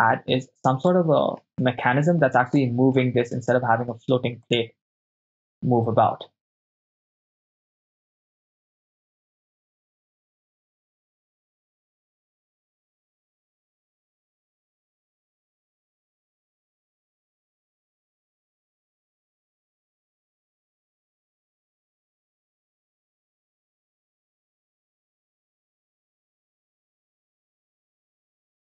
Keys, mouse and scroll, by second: 1.0-1.5 ctrl+middle drag, 1.7-2.3 middle drag, 2.6-3.0 ctrl+middle drag, 4.6 click, 5.4 right click, 7.0 right click, 7.1-12.8 typing, 7.4 ctrl+shift+middle drag, 8.3 Return, 8.6 Return, 9.0 ctrl+click, 9.2 ctrl+click, 9.5 ctrl+click, 10.8 ctrl+click, 11.2 middle click, 11.7 ctrl+click, 12.4 ctrl+z, 13.1 ctrl+click, 13.8 shift+right click, 14.1 shift+d, 14.2 x, 14.7 ctrl+click, 15.2 ctrl+z, 15.3 ctrl+z, 16.5 shift+right click, 16.7-28.7 typing, 16.8 Return, 17.2 click, 17.8 right click, 17.9 click, 18.6 click, 19.2 click, 19.4 middle click, 20.0 shift+right click, 20.5 ctrl+right click, 20.6 shift+right click, 20.8-21.4 shift+right click, 21.2 shift+right click, 21.7 ctrl+click, 22.6 click, 22.6 right click, 22.7 shift+right click, 23.4 ctrl+click, 23.7 middle click, 24.2 ctrl+click, 24.4 ctrl+click, 24.4 middle click, 25.1 ctrl+click, 25.3 right click, 25.4 shift+right click, 26.0 ctrl+click, 26.1 middle click, 26.6 ctrl+click, 27.1 right click, 27.3 shift+right click, 27.9 ctrl+click, 27.9 ctrl+middle click, 28.2 right click, 28.4 shift+right click.